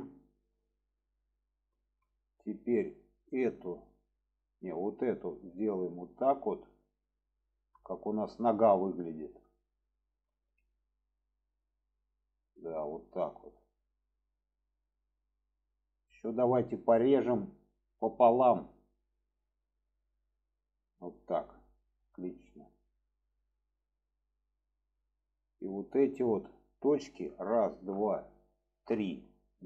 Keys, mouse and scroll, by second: 0.7 shift+middle click, 1.2 shift+middle click, 2.6-3.3 drag, 4.4-4.7 drag, 5.6-8.2 drag, 10.3 alt+z, 10.7-13.7 middle drag, 14.0-14.4 middle drag, 15.0-15.6 middle drag, 15.9-16.9 middle drag, 18.9 click, 19.3 middle click, 21.1 click, 22.7-23.3 middle drag, 23.7 middle drag, 24.6-25.7 middle drag, 27.2 click, 27.7 shift+drag, 28.0 middle drag, 28.7 shift+click, 29.0-29.6 alt+middle drag.